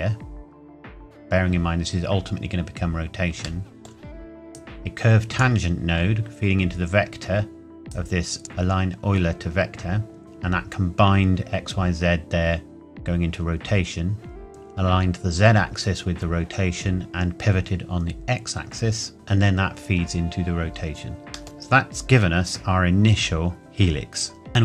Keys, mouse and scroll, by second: 3.6 middle click, 4.5 click, 7.8 click, 20.7-21.4 scroll down 1, 21.4 ctrl+s, 21.6 middle click.